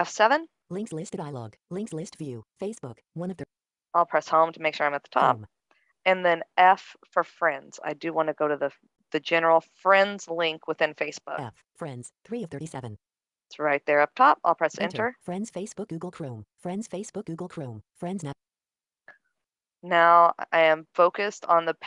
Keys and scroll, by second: 4.2 Home, 8.0 f.